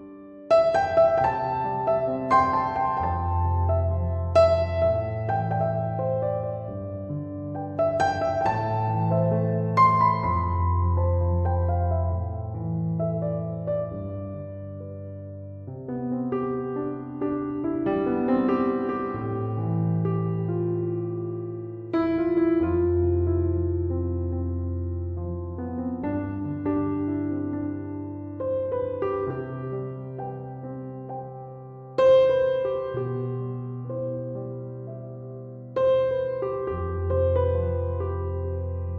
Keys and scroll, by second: 0.0-1.3 typing, 21.1 9, 21.9 Tab, 22.4-23.4 typing, 23.7 Tab.